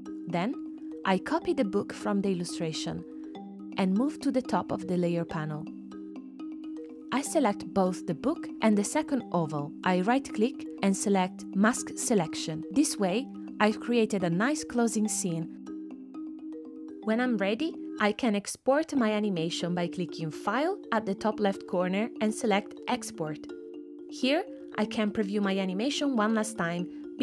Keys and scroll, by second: 15.0 space, 16.8 space.